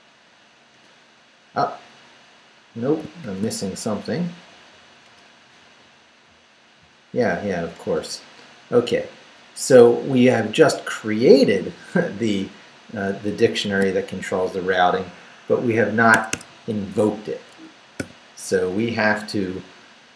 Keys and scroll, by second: 0.7 Return, 3.2 shift+;, 3.7 shift+Up, 5.0 Return, 7.9 Return, 9.0 Down, 9.4 Up, 10.0 Right, 13.7 shift+v, 16.1 Escape, 18.0 o.